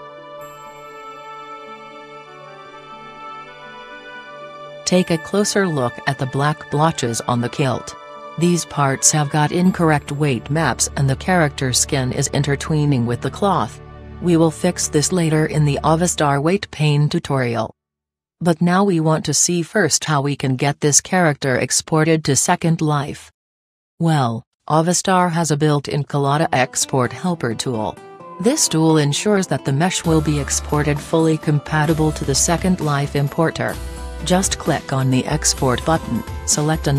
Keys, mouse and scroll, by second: 0.3 KP_1, 1.3 g, 4.7-6.4 drag, 5.2 g, 7.1 click, 10.8-13.0 middle drag, 26.9-28.6 drag, 30.1-31.8 right drag, 36.8 click.